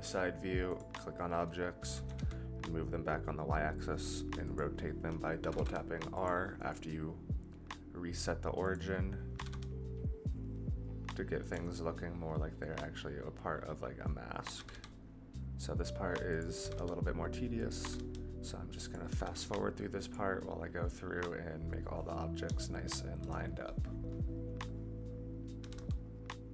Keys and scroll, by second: 1.9 g, 5.4 r, 9.3 r, 14.5 r, 16.6 r, 19.0 r, 23.2 KP_0, 25.6 r.